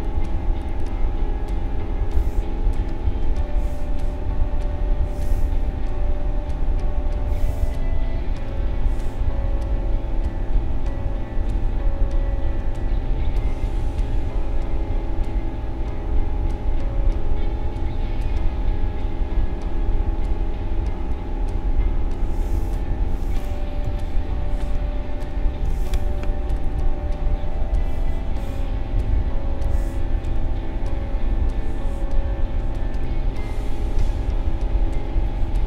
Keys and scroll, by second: 23.8 i.